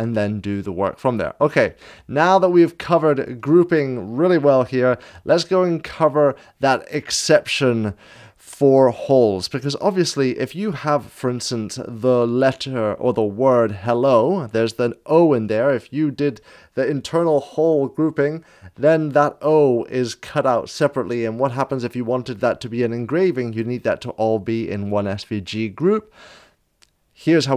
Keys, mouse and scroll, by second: 1.0 click.